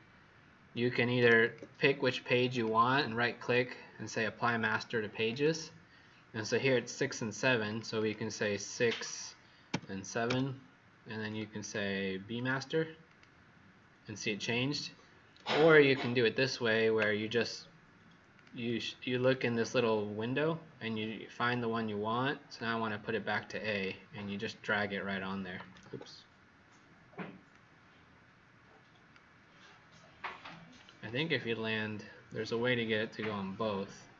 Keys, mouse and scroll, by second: 1.4 shift+click, 1.9 click, 2.4 click, 2.8 shift+click, 2.8 right click, 5.2 click, 7.9 click, 9.7-10.7 typing, 11.2 click, 11.5 click, 12.3 click, 18.6 click, 22.5 click, 25.8 ctrl+z, 27.5 click.